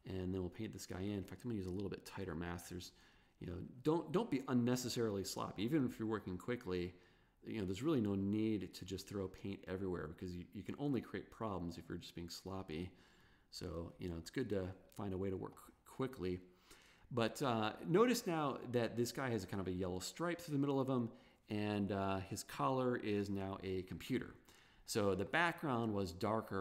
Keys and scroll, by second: 1.2 super+z, 2.2 super+[, 13.6 super+=, 15.2 super+space.